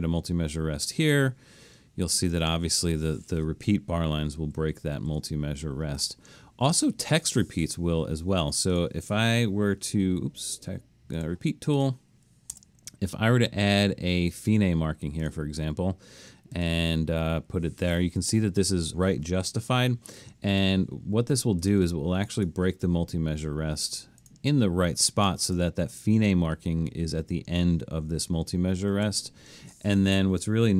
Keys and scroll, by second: 4.4 super+z, 5.0 super+z, 12.6 Return, 19.8 Escape, 29.0 super+z.